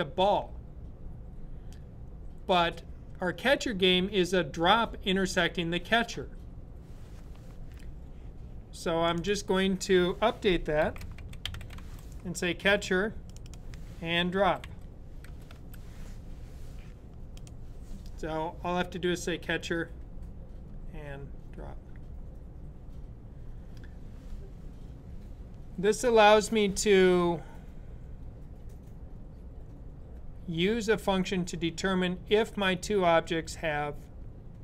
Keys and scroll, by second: 10.3-12.1 typing, 14.2-15.7 typing.